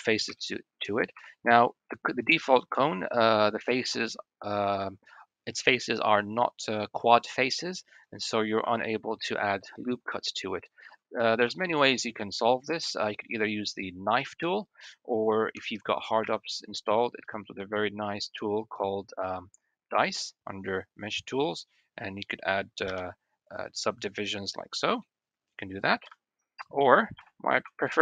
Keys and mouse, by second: 0.3 shift+click, 1.0 1, 8.5 ctrl+r, 11.4 shift+click, 12.9-13.3 drag, 15.4 Tab, 16.1 q, 24.9 drag, 25.1-25.6 middle drag, 25.9 ctrl+z, 27.0 KP_1, 27.5 Tab.